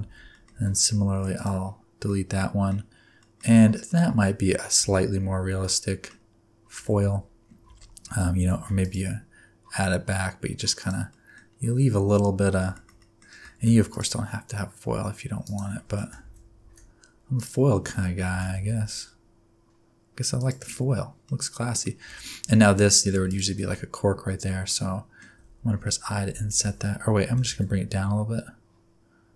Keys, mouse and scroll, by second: 0.0 alt+z, 0.0 alt+click, 0.0 scroll up 2, 0.3 middle click, 0.5 x, 2.0 middle click, 2.7-3.1 scroll down 3, 3.2 middle click, 3.4 scroll down 1, 3.5 Tab, 3.8 middle click, 4.8 Tab, 5.3 alt+z, 5.6 middle click, 6.3-6.6 scroll up 2, 6.7 alt+z, 7.4 scroll down 4, 7.6 alt+z, 8.0 alt+z, 8.2 scroll up 1, 8.5 ctrl+r, 11.1 middle click, 11.4 scroll up 2, 12.7 shift+middle click, 13.0 middle click, 13.5 ctrl+r, 16.2 ctrl+z, 16.7 ctrl+z, 17.3 alt+click, 17.8 alt+z, 18.2 g, 20.7 Tab, 21.0 scroll down 2, 21.2 middle click, 21.9-23.1 scroll up 2, 22.0 Tab, 23.1 3, 23.2 click, 23.5 alt+z, 24.7 middle click, 25.3 alt+z, 27.2 g.